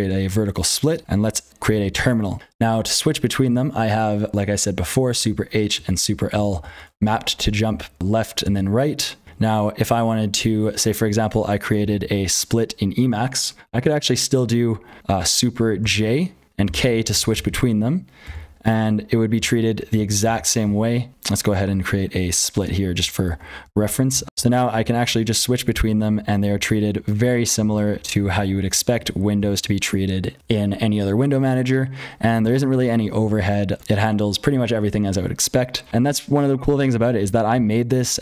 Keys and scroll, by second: 0.0-38.2 typing, 1.1 ctrl+z, 5.1 super+h, 5.7 super+l, 6.1 super+h, 6.3 super+l, 6.7 super+h, 7.6 super+l, 8.0 super+h, 8.4 super+l, 9.2 super+h, 11.7 ctrl+x, 12.1 ctrl+x, 15.8 super+j, 16.6 super+k, 16.9 super+j, 17.0 super+k, 17.2 super+j, 18.2 super+l, 18.7 super+h, 19.3 super+l, 19.6 super+h, 19.9 super+j, 20.2 super+k, 20.5 super+l, 21.4 ctrl+z, 23.2 super+j, 23.6 super+k, 24.1 super+j, 24.2 super+h, 24.7 super+l, 25.0 super+j, 25.3 super+h, 25.7 super+k, 26.0 super+j, 26.3 super+h, 26.5 super+k, 26.9 super+h, 27.2 super+j, 27.5 super+l, 27.9 super+k, 28.2 super+j, 28.5 super+h, 28.9 super+j, 29.3 super+k, 32.3 super+j, 32.6 super+l, 33.1 super+j, 33.7 super+k, 33.8 super+h, 35.9 ctrl+x.